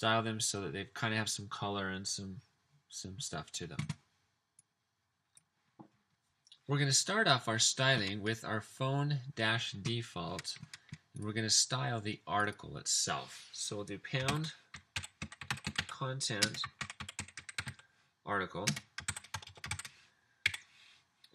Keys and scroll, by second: 14.1-20.2 typing, 19.3 Return, 20.5 Up.